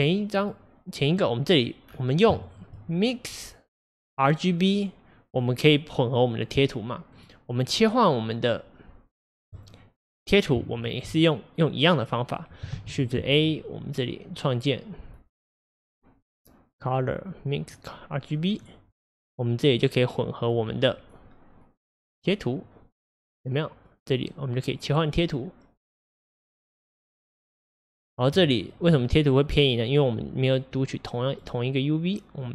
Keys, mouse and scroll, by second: 1.1-9.6 drag, 19.8-20.5 drag, 22.7-25.9 drag, 29.6-30.7 shift+middle drag, 30.7 click.